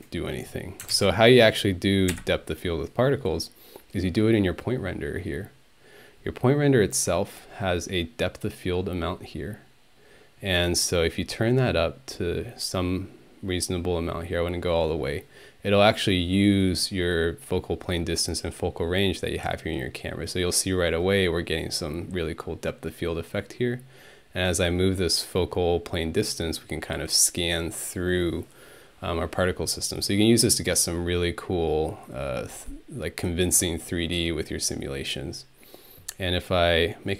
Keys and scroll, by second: 2.1 ctrl+Delete.